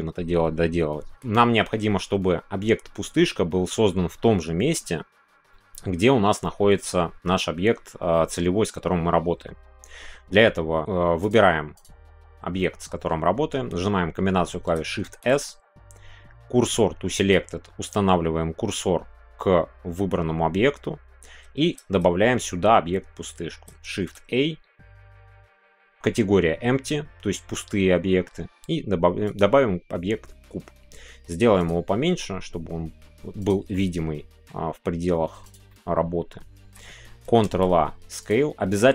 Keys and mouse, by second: 6.8-7.2 middle drag, 8.1 middle click, 12.6 middle click, 15.0 shift+s, 23.9 shift+a, 31.4 s, 31.6 click, 32.0 s, 33.4 click, 33.7 middle click, 34.7 s, 35.4 click, 35.7-36.7 middle drag, 37.4 ctrl+a.